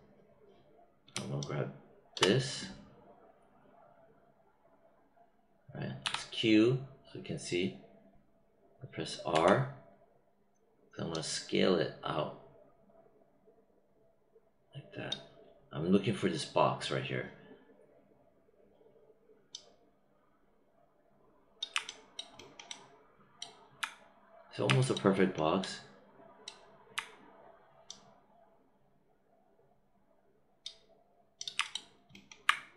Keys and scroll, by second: 6.0 q, 9.2 r.